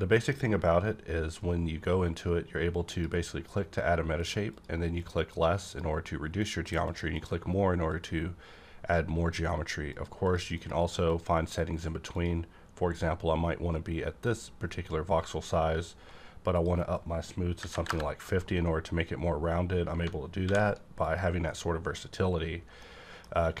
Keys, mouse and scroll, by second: 2.9 click, 4.5 click, 6.6 click, 6.8 click, 7.1 click, 7.9 click, 14.2 click, 16.5 click, 17.6 KP_5, 17.7 KP_0, 17.9 KP_Enter, 20.4 alt+v, 21.0 click, 22.8-23.6 middle drag.